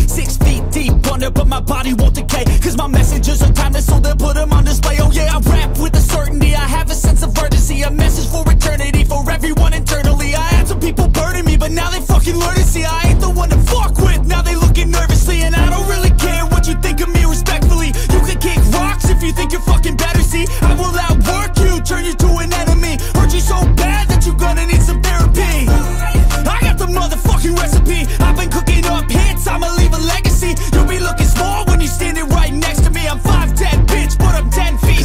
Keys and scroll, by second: 24.5 ctrl+i, 26.4 ctrl+alt+z, 26.8 ctrl+alt+z, 27.2 ctrl+alt+z.